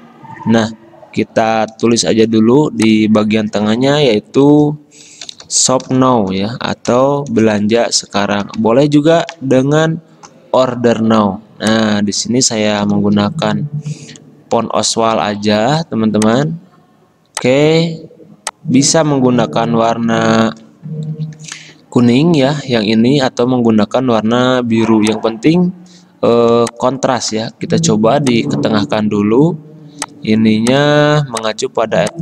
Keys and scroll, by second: 2.2 t, 4.6-9.4 typing, 9.6 ctrl+a, 12.7-13.8 typing, 15.4-16.1 typing.